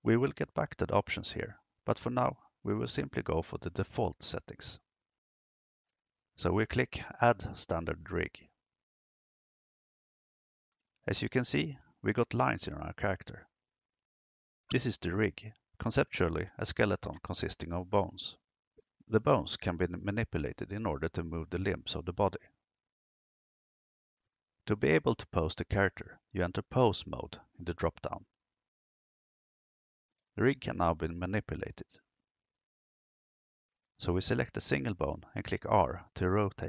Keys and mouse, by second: 9.1 click, 26.3-29.2 drag, 34.5 right click.